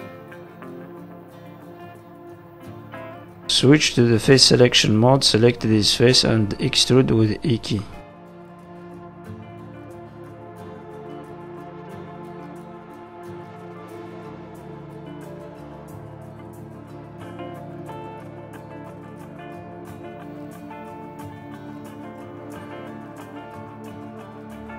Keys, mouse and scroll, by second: 0.1 middle click, 0.5 z, 2.1 middle click, 3.0 shift+middle click, 4.5 click, 5.3 click, 6.2 middle click, 7.2 e, 8.9 click, 9.8 click, 11.2-11.5 scroll up 3, 12.1 click, 13.3 click, 14.1 click, 15.1 middle click, 15.9 click, 17.3-17.7 scroll down 4, 17.7 shift+middle click, 18.0 middle click, 18.1 Tab, 18.4 scroll down 2, 18.7 shift+middle click, 19.1 middle click, 20.2 shift+middle click, 20.5 middle click, 20.9-21.4 scroll up 2, 21.4 scroll down 2, 21.6 shift+middle click, 22.0 Tab, 22.2 middle click, 23.0 shift+middle click, 23.3-23.9 scroll up 4, 23.9 middle click.